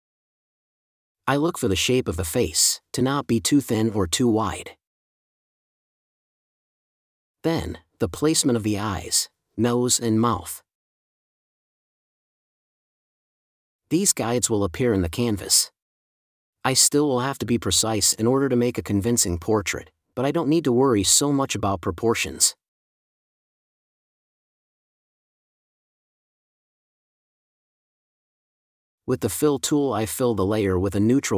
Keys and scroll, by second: 10.9 space, 19.8 Delete, 29.1 space, 30.0 super+z.